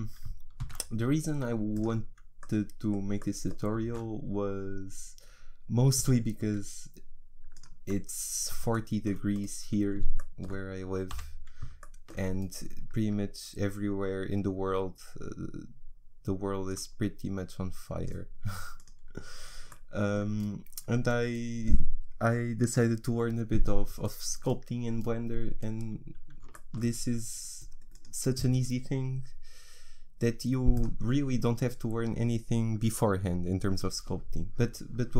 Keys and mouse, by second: 0.6 shift+s, 3.8 shift+a, 6.5 s, 11.1 n, 14.5-16.7 middle drag, 16.7-20.7 drag, 20.7-27.9 middle drag, 27.9-30.8 drag.